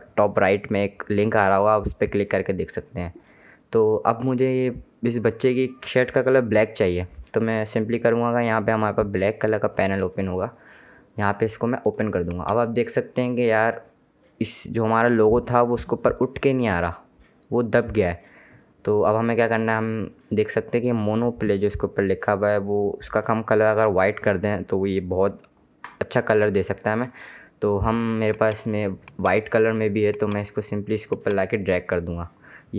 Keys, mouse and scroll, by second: 11.9 click, 28.1 click.